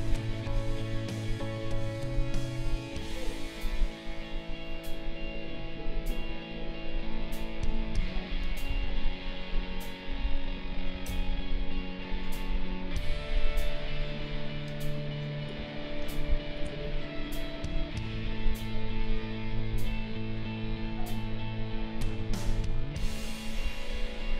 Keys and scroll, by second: 8.7 ctrl+z, 11.1 ctrl+z, 15.6 space.